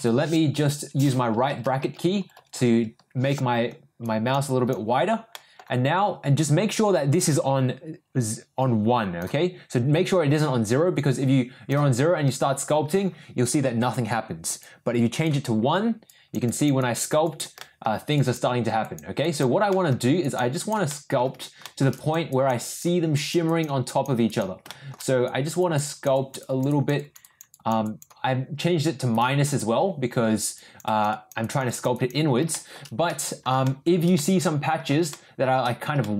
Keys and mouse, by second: 0.0 n, 1.3-2.7 typing, 4.0 click, 4.4 click, 5.3 middle click, 6.8-9.2 drag, 10.4-11.7 drag, 14.6 click, 16.1 click, 16.4 click, 16.8 click, 17.2 click, 17.6 middle click, 18.1 click, 18.8 click, 19.2 click, 19.7 middle click, 20.2 click, 20.6 click, 20.9 middle click, 21.6 shift+middle click, 21.9 click, 22.3 click, 22.6 click, 23.1 click, 23.4 click, 23.8 click, 24.2 click, 24.7 shift+middle click, 25.2 click, 25.6 click, 25.8 click, 26.1 click, 26.4 click, 26.7 click, 26.9 click, 27.2 click, 27.5 click, 27.8 click, 29.1 click, 29.5 click, 30.5 click, 30.8 click, 31.1 click, 31.4 click, 31.6 click, 31.9 click, 32.5 shift+middle click, 33.1 middle click, 33.6 shift+middle click, 34.1 middle click, 35.1 shift+middle click, 36.0 shift+middle click.